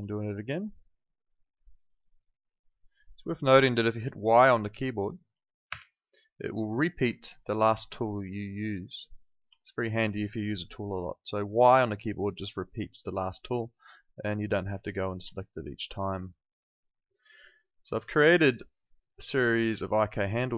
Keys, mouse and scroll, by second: 4.5 alt+click, 5.7 y, 7.2 click, 9.6 alt+click, 9.9 alt+right click, 10.1 alt+click, 10.4 alt+right click, 10.7 alt+click, 11.2 alt+right click, 11.7 alt+middle click, 12.0 alt+right click, 12.3 alt+middle click, 12.6 alt+click, 15.4 alt+click.